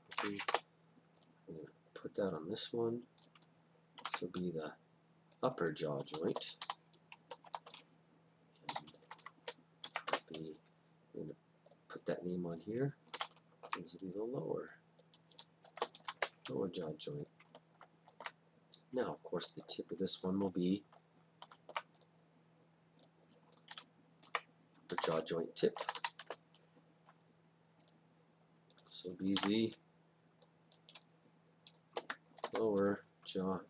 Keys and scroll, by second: 0.2 ctrl+c, 0.5 Return, 4.0 ctrl+v, 6.2-7.5 typing, 8.7 End, 9.1 ctrl+shift+Left, 9.9 ctrl+c, 10.1 Return, 13.2 ctrl+v, 15.7 shift+l, 16.0 w, 16.2 Return, 23.8 ctrl+v, 25.0 shift+-, 25.7 shift+t, 25.8 i, 26.0 p, 26.3 Return, 29.4 ctrl+v, 32.3 shift+l, 32.5 w.